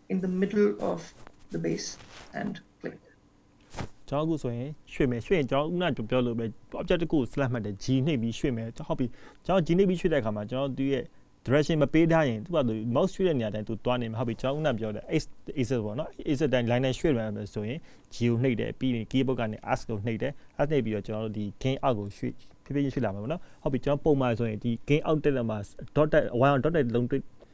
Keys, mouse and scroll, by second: 5.0-5.7 scroll up 3, 5.7 shift+middle click, 6.4-6.7 scroll up 1, 7.0 shift+middle click, 9.9-10.4 scroll up 3, 10.7 shift+middle click.